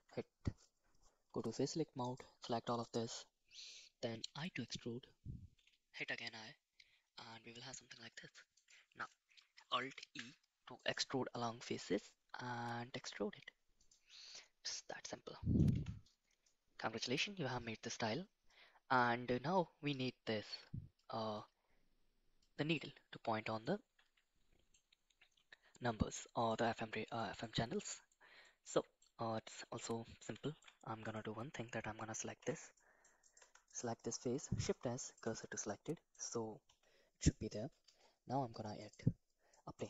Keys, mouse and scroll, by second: 1.3 3, 2.1 alt+click, 2.6 right click, 4.3 i, 10.0 alt+e, 14.3-15.6 middle drag, 15.7 Tab, 16.4-17.5 middle drag, 18.4-18.9 middle drag, 19.5 middle click, 21.0 middle click, 22.4 middle click, 23.6-24.7 middle drag, 26.1-26.4 middle drag, 27.1 middle drag, 28.1 middle drag, 28.7 middle click, 29.5 middle drag, 30.4 shift+middle drag, 31.0 click, 32.4 /, 32.7 middle drag, 33.3 click, 33.4 Tab, 33.6 click, 34.5 shift+s, 35.2 Tab, 35.6-36.1 middle drag, 36.6 /, 37.2 middle drag, 37.8 shift+a, 39.5 middle click.